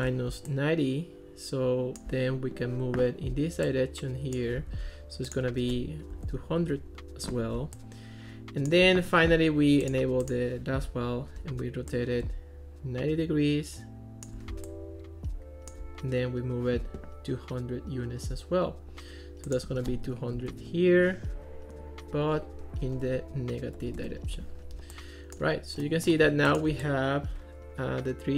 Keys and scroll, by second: 4.6 super+z, 5.9-6.9 typing, 20.2-21.1 typing, 23.2 Left, 23.8 -, 24.0 Return.